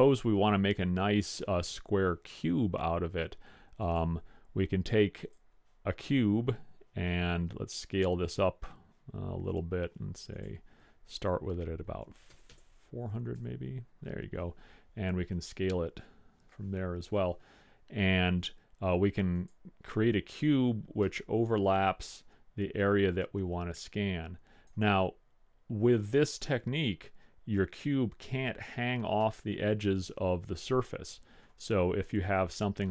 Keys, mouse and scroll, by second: 1.5-3.4 middle drag, 3.9-6.5 drag, 6.5 middle click, 7.0 click, 7.3-8.6 middle drag, 10.5-12.2 drag, 12.6 KP_0, 15.4 s, 21.2-23.1 middle drag, 23.1 click, 26.2-27.9 drag, 29.3-29.6 middle drag, 29.7-31.2 middle drag.